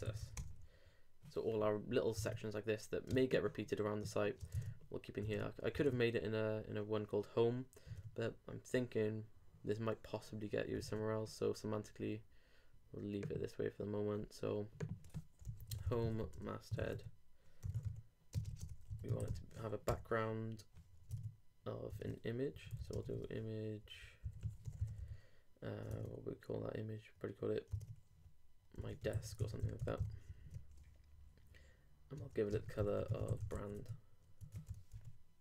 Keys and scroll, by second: 2.2 super+Tab, 3.1 super+space, 4.6 super+Tab, 7.9 super+Tab, 10.8 super+Tab, 18.4 shift+space, 18.5 shift+[, 18.7 shift+Return, 21.2 super+Tab, 22.5 super+u, 22.7-23.8 typing, 25.9 super+/, 26.0 super+Tab, 27.8 super+Tab, 28.8 super+m, 30.3 super+g, 30.4 super+Right, 32.5 shift+space, 32.8 shift+b, 33.5 super+;, 33.7 super+s, 33.8 super+Tab, 34.9 super+r.